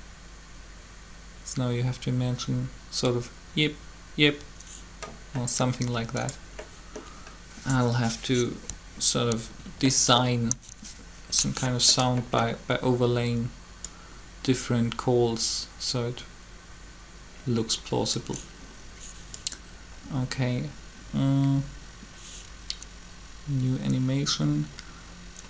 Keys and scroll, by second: 10.2 3.